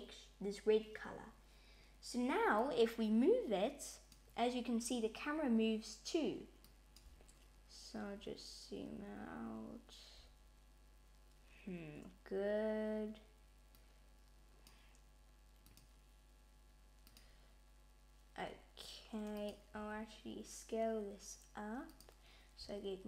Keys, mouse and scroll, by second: 2.4 click, 6.5 click, 13.5 click, 15.5 click, 19.2 click, 19.6 s.